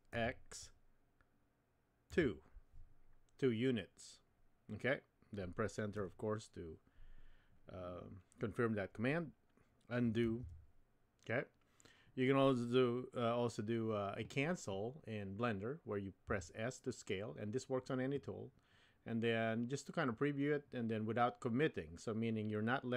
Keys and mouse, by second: 10.2 super+z, 16.3 s.